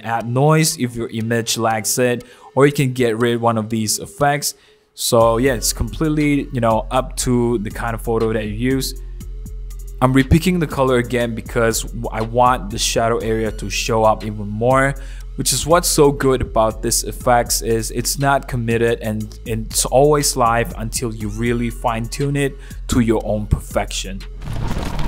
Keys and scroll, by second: 4.8 super+0, 5.0 super+-, 6.8 super+0, 7.1 super+=, 7.5 super+=, 7.7 super+0, 8.0 super+-, 9.1 super+1, 9.4 super+0, 20.6 super+c, 21.9 super+v.